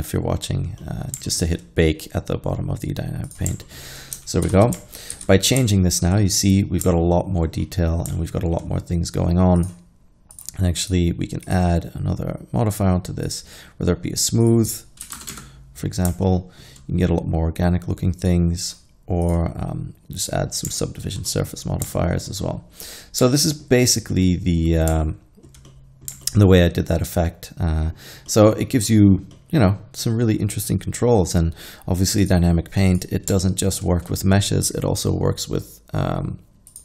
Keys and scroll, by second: 4.5 shift+Left, 5.2 alt+a, 8.0 shift+Left, 8.0 alt+a, 15.1 1, 15.4 Return, 15.4 0.